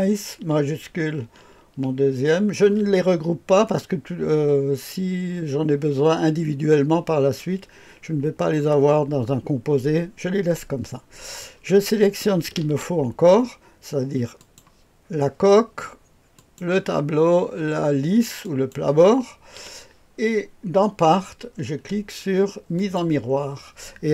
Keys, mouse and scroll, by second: 2.2 shift+click, 14.3 ctrl+click, 16.3 ctrl+click, 18.3 ctrl+click, 22.7 click.